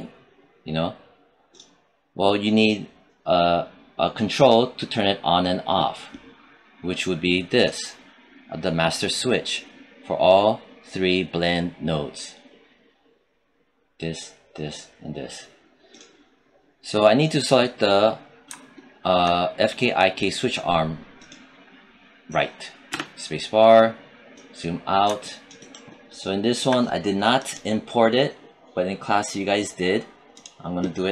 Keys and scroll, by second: 22.8 space.